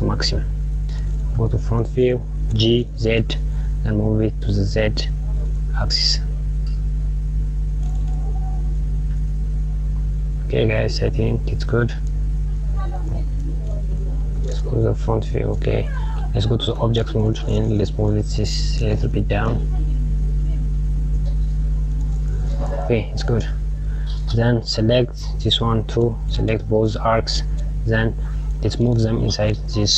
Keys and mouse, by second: 1.7 KP_1, 15.4 KP_1, 16.7 Tab, 17.6 g, 26.2 shift+click, 27.5 click.